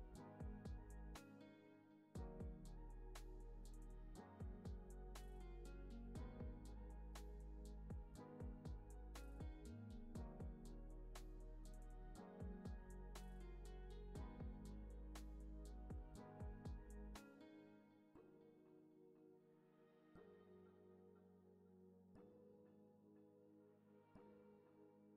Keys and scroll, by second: 0.9 super+=.